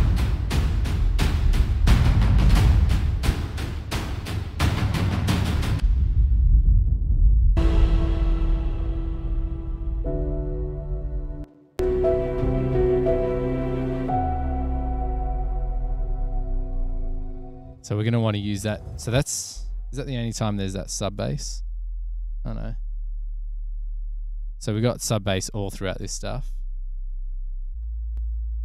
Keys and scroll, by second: 11.5 space, 11.9 space, 19.9 super+=.